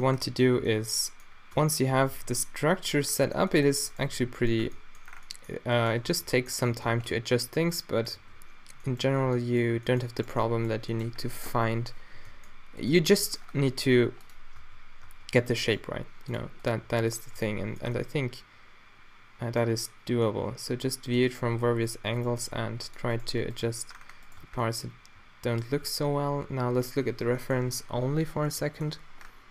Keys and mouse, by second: 1.6 Tab, 1.9 a, 2.2 b, 4.0-4.9 drag, 4.2 q, 4.7 Tab, 6.1 Tab, 6.9 a, 7.0 b, 8.2 q, 9.3 b, 10.2-11.4 drag, 11.8 o, 12.2 g, 13.2 g, 14.3 drag, 14.7 Tab, 15.1 Tab, 15.8 g, 16.9 g, 17.4 Tab, 17.5-18.3 middle drag, 21.4 Tab, 21.9-22.9 drag, 22.3 g, 23.6 g, 24.4 Tab, 24.6 click, 25.3-26.2 drag, 26.2 3, 26.9 click, 28.0 click.